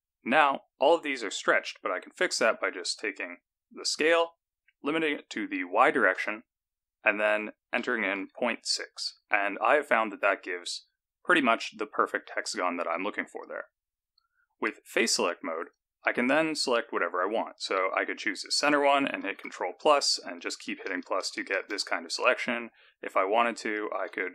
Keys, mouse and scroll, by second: 4.0 s, 10.3-10.8 scroll down 4, 10.8-12.5 scroll up 11, 12.8-13.3 scroll down 3, 15.0 3, 15.5 click, 16.3 scroll down 2, 19.3 ctrl+KP_Add, 19.5 ctrl+KP_Add, 19.7-21.7 ctrl+KP_Add, 24.0 alt+a.